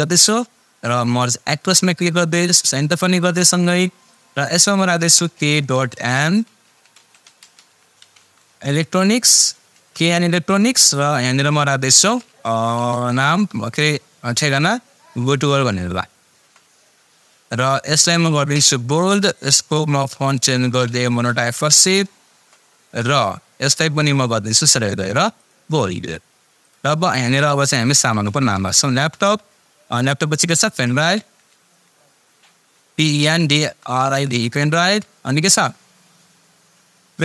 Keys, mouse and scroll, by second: 4.8-9.9 typing, 10.1 Return, 12.4-16.2 typing, 16.4 Return, 17.5 click, 17.5 click, 21.1-22.0 typing, 22.3 Return, 23.8-24.7 drag, 27.3-28.7 typing, 28.9 Return, 31.1-31.7 typing, 32.7-34.9 typing.